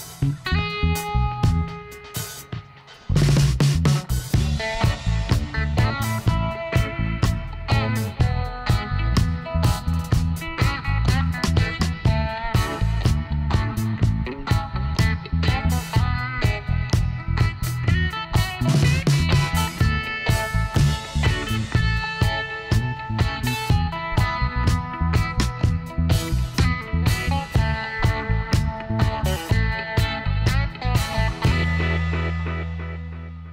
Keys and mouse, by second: 0.0 e, 0.1-3.7 middle drag, 3.7 i, 7.1 Tab, 7.6 a, 7.9 middle click, 8.4 a, 10.4 Tab, 11.7 ctrl+r, 14.1 ctrl+r, 15.6 ctrl+z, 16.5 ctrl+r, 18.4 ctrl+r, 21.6-24.6 middle drag, 24.6-25.6 right drag, 24.6 w, 29.0 click, 29.1 Tab, 29.3-31.0 drag, 30.5 z, 31.3 z, 32.2 a, 32.6 a.